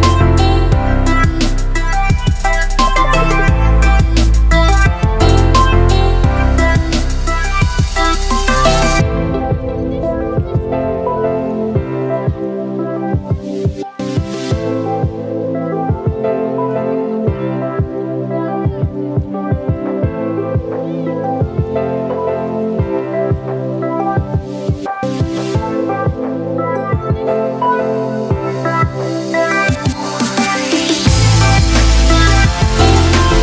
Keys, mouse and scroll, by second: 2.2 space, 2.3 click, 2.7 space, 3.9 click, 4.3 space, 4.8 click, 4.9 space, 5.8 click, 5.9 space, 6.7 alt+click, 9.8-16.4 ctrl+drag, 16.4 space, 16.7 alt+click, 24.2 click, 25.9 space, 26.2 alt+click, 28.5 space, 28.7 ctrl+click.